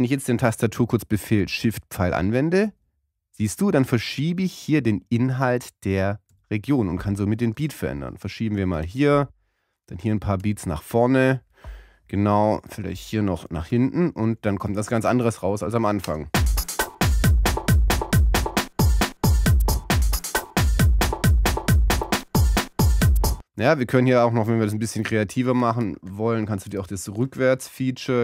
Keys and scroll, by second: 2.9 shift+Right, 5.7 shift+Right, 6.6 shift+Left, 10.7 shift+Left, 14.0 shift+Right.